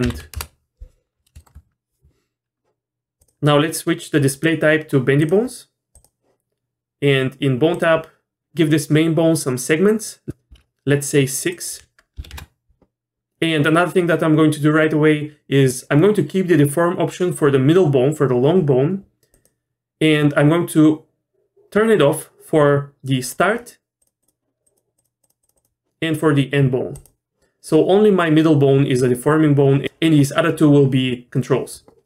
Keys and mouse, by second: 1.4 shift+middle click, 4.3-5.3 drag, 7.7 click, 10.3 click, 11.6-13.0 drag, 23.2 click, 24.6 click, 25.2 click, 26.9 click.